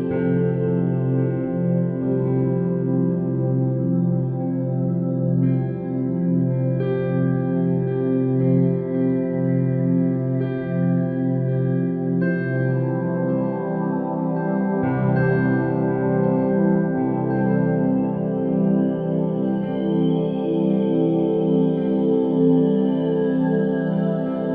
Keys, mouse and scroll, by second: 0.9-4.3 right drag, 4.3 Tab, 4.6 1, 5.6 KP_7, 6.5 a, 7.0 e, 10.4 Tab, 10.7 g, 14.6-17.6 middle drag, 17.7 click, 18.1 x, 18.9 click, 21.5-24.5 drag.